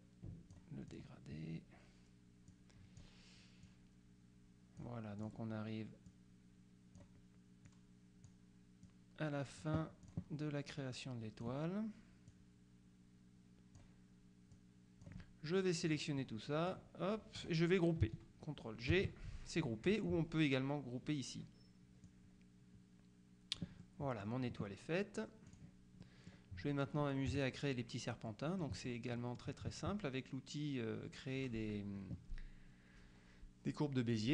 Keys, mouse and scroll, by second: 2.6 click, 3.7-5.9 drag, 6.2 click, 7.8-8.9 drag, 8.9-10.7 drag, 11.0 click, 12.4-14.3 drag, 14.6 click, 15.9 click, 16.7 click, 19.0 ctrl+g, 22.1-24.2 drag, 25.6 click, 27.4 KP_Subtract, 28.3-29.4 middle drag.